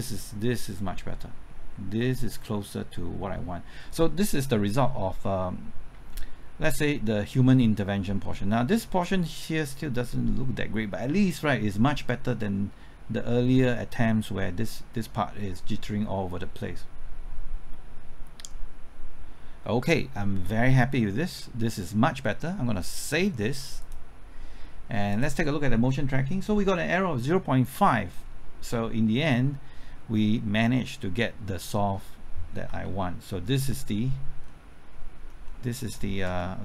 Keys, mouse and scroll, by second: 28.2-28.7 scroll down 1, 28.7 middle click, 31.9-32.5 scroll up 1, 32.5 scroll down 1, 32.8 ctrl+middle click, 33.7 typing, 33.9 ctrl+middle click, 34.5 ctrl+middle click, 35.5 ctrl+middle click, 36.4-36.6 middle drag.